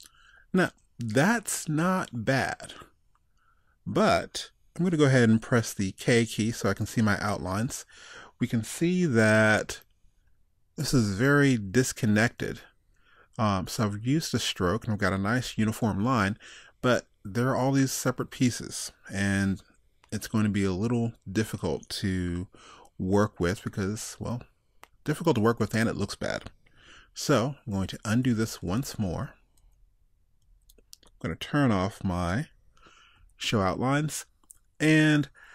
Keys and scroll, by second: 27.8 super+z, 30.5 super+z.